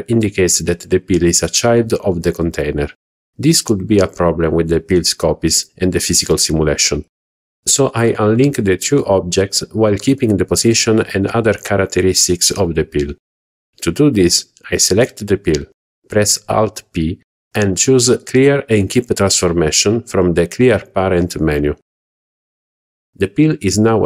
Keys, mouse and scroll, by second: 15.9 alt+p, 22.7 click.